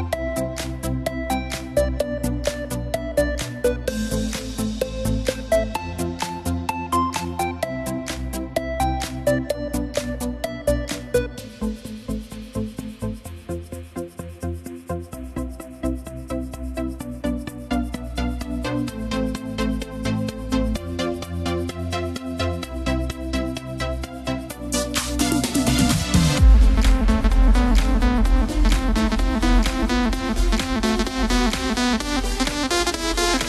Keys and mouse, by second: 0.2 s, 4.9 click, 7.4 e, 12.2 g, 15.8 click, 17.9 e, 20.4 click, 24.7 s, 28.8 click, 31.5 e.